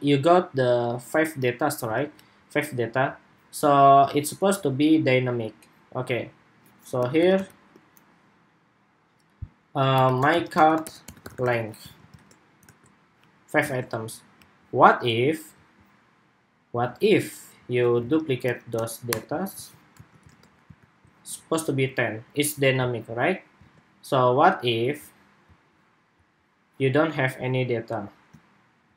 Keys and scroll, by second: 1.7 super+Tab, 11.6 super+s, 12.0 super+Tab, 12.4 super+r, 13.4 super+Tab, 17.7 super+c, 19.3 super+v, 19.8 super+s, 20.0 super+Tab, 20.5 super+r, 23.3 super+Tab.